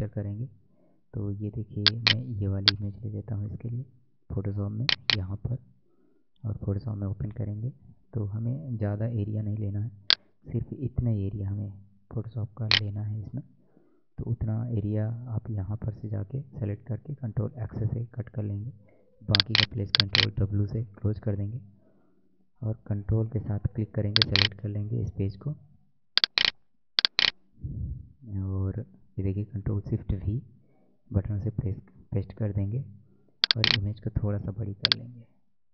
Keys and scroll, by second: 17.1 ctrl+x, 18.5 ctrl+w, 30.0 ctrl+shift+v.